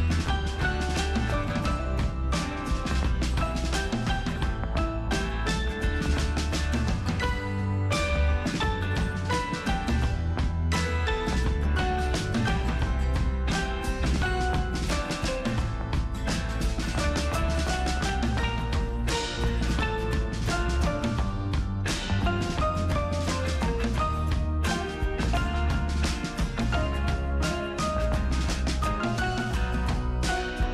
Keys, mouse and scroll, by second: 0.2 ctrl+super+v, 1.0 super+click, 1.8-3.3 super+drag, 3.3 ctrl+super+c, 3.6 super+click, 3.9 ctrl+super+v, 4.2 super+click, 4.9-5.7 super+scroll down 1, 6.5-7.8 super+drag, 7.8 ctrl+super+c, 8.2 super+click, 8.5 ctrl+super+v, 9.6 super+click, 12.0 super+click, 17.1 super+click, 20.2 super+click, 24.0 super+click, 26.2-30.1 super+drag.